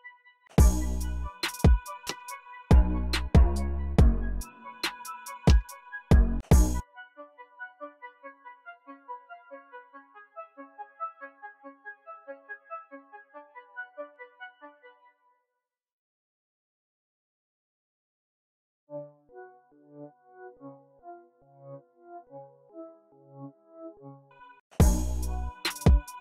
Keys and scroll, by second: 0.4 space, 3.8 e, 5.6 super+a, 5.9 alt+shift+Page_Down, 6.2 space, 6.3 space, 6.6 s, 14.6 space, 18.6 space, 23.1 x, 24.0 space, 24.5 space.